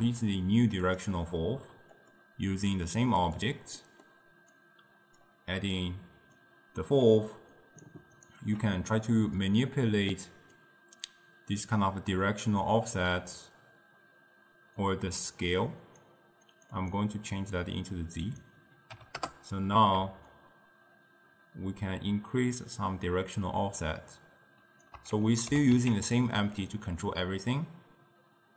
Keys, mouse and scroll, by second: 1.2-2.0 middle drag, 2.0 click, 3.9-4.7 middle drag, 4.7-8.3 drag, 10.7-14.1 drag, 16.5-24.0 drag, 25.5 g.